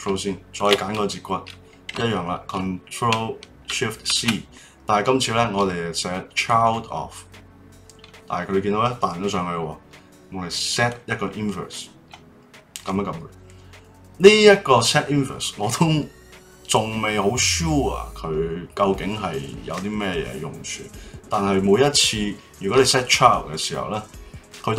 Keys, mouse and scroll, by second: 0.5 shift+click, 4.1 ctrl+shift+c, 10.7 click.